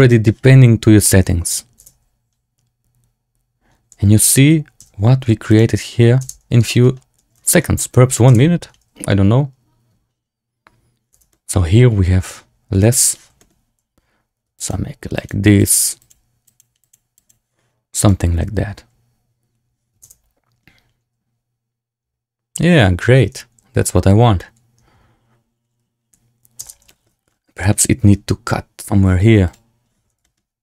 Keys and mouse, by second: 1.7 space, 5.0 w, 6.2 space, 6.6 shift+drag, 7.3 shift+drag, 7.7-8.1 drag, 8.2 space, 11.2 space, 11.2 drag, 13.0 click, 13.3 shift+click, 14.5 click, 15.1 click, 15.5 click, 15.9 click, 16.4 click, 16.7 click, 17.1 click, 19.9 space, 26.6 space, 26.8 shift+drag, 27.5 shift+middle click, 29.6 click, 30.1 shift+click.